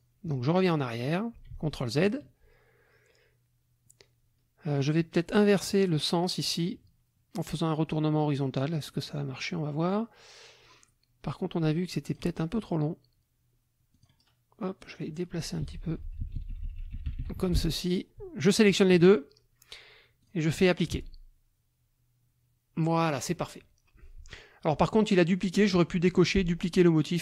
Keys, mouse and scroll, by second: 1.0 ctrl+click, 1.5 ctrl+z, 5.4 click, 8.7 click, 12.1 click, 13.9 click, 14.8 click, 15.6 Left, 17.3 F1, 18.4 shift+click, 20.2 click, 20.8 click.